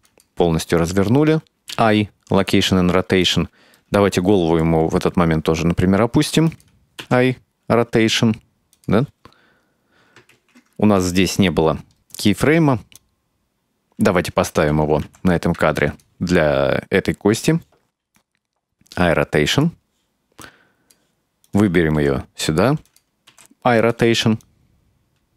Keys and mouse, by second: 1.8 |, 3.3 right click, 3.9-4.7 middle drag, 4.9 r, 7.1 |, 10.4 ctrl+z, 11.8 right click, 12.2 click, 13.5 right click, 18.2-19.0 drag, 19.6 right click, 20.5 click, 21.5 right click, 22.0 r, 23.4 i, 24.5-25.3 drag.